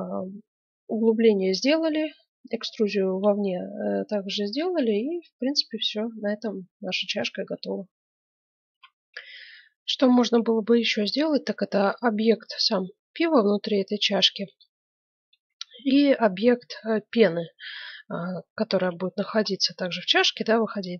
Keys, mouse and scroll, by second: 3.3-5.0 middle drag, 8.6 F9, 18.4 click, 18.5 middle click, 18.6 click, 19.3-20.9 middle drag.